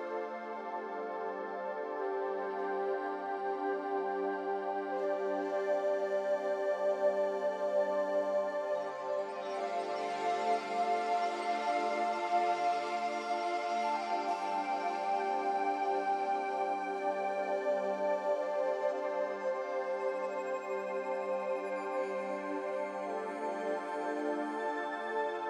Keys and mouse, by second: 3.6 ctrl+r, 7.2 ctrl+r, 10.5 3, 11.6 click, 13.0-13.9 middle drag, 15.4 e, 21.0 Tab, 23.7-24.0 middle drag, 24.3-24.8 middle drag.